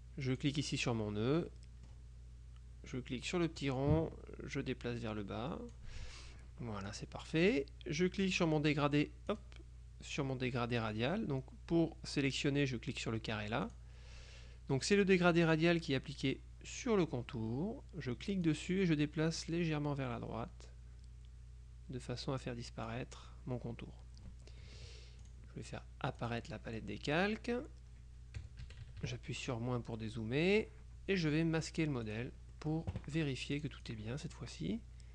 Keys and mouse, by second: 0.4 click, 1.6 click, 3.7-6.4 drag, 7.0 click, 8.4 click, 9.4 click, 13.8 click, 18.6-23.5 drag, 25.4 click, 26.3 click, 28.5 KP_Subtract, 30.1-31.2 drag, 32.2 click, 33.6-35.0 drag.